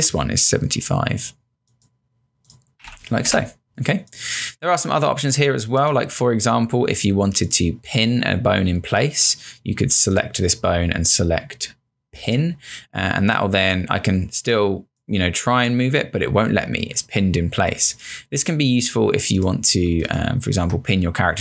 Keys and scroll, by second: 2.8 typing, 3.3 Return, 5.4 space, 20.1 space.